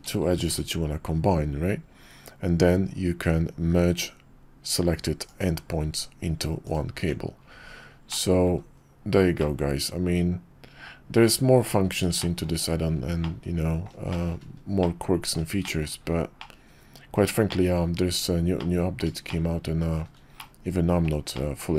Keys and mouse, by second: 0.3 alt+shift+c, 6.6 click, 6.9 Tab, 8.1-8.4 drag, 8.8 KP_5, 9.4-11.2 middle drag, 12.2 shift+middle drag, 13.2-13.8 middle drag, 14.1 shift+middle click, 14.8-15.3 middle drag, 15.6 shift+middle drag, 16.4-17.2 middle drag, 17.5 shift+middle drag, 18.6-19.0 middle drag, 19.3-20.0 shift+middle drag, 20.4-21.0 middle drag, 21.3-21.7 shift+middle drag.